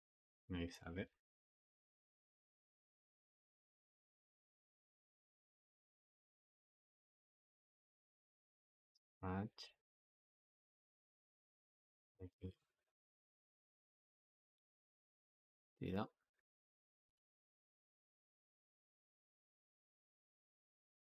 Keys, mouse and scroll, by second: 0.8 g, 3.1 click, 3.4 g, 5.5-8.7 drag, 8.7 g, 10.7-11.8 drag, 11.8 g, 13.3 g, 14.2 click, 14.5 g, 16.1 click, 16.1 g, 17.5 click, 17.5 g, 20.2 click, 20.4 g.